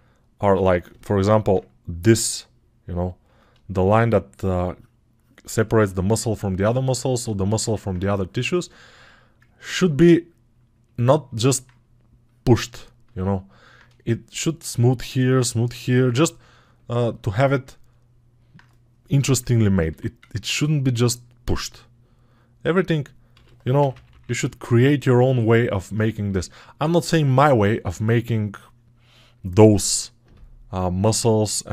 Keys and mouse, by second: 0.9 alt+[.